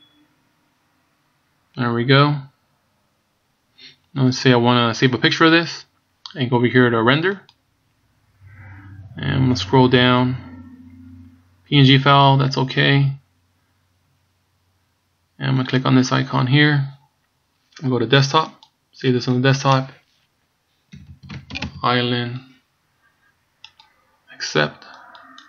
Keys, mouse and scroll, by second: 8.0 click, 9.8-11.2 scroll down 9, 11.4-11.8 scroll down 2.